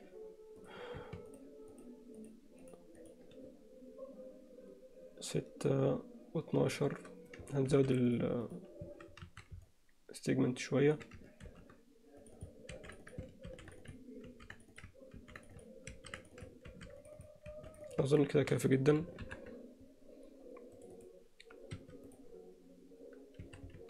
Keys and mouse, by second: 0.6 click, 2.2 shift+click, 2.7 shift+click, 3.1 shift+click, 7.7 ctrl+r, 8.9 a, 9.7-10.9 alt+middle drag, 11.5 ctrl+r, 12.7 ctrl+r, 13.5 ctrl+r, 14.3 ctrl+r, 15.2 ctrl+r, 15.9 ctrl+r, 16.7 ctrl+r, 17.8 ctrl+r, 19.3 ctrl+KP_7, 20.8 click, 21.0 click, 21.7 q, 23.5 a.